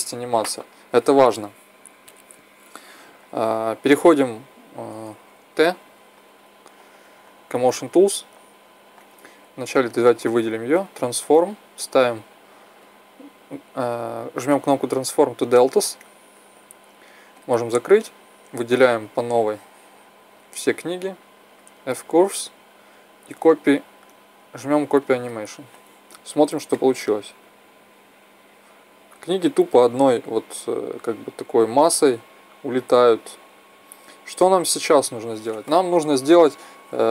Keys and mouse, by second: 5.1 t, 7.4-9.1 drag, 9.1 middle click, 9.3-10.0 right drag, 10.0-10.5 middle drag, 10.5-11.0 right drag, 11.0 click, 11.1-12.5 middle drag, 12.7-14.7 drag, 15.4-19.2 drag, 18.7 b, 21.7 click, 22.0-23.1 drag, 24.8-28.4 drag.